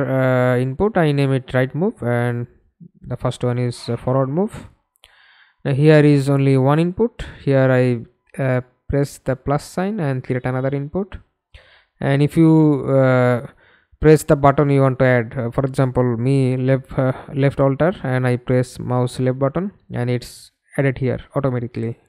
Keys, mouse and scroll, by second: 0.3-2.0 typing, 12.6 alt+click, 17.0 w, 19.1 alt+w.